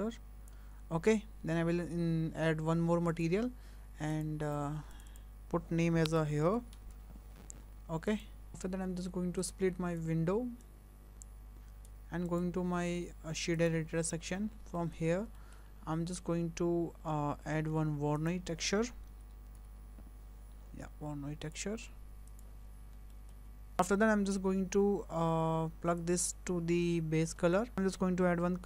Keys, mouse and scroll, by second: 3.1 click, 4.1 click, 5.0 click, 5.1 click, 8.5 click, 9.4 click, 10.6 click, 12.3 click, 14.4 scroll up 6, 14.8 shift+middle click, 15.1 scroll down 3, 15.4 shift+middle click, 15.8 scroll up 1, 17.7 shift+a, 22.7 scroll down 6, 23.1 shift+middle click, 23.7 click, 24.2-24.6 scroll up 1, 26.0 click, 27.7 shift+a.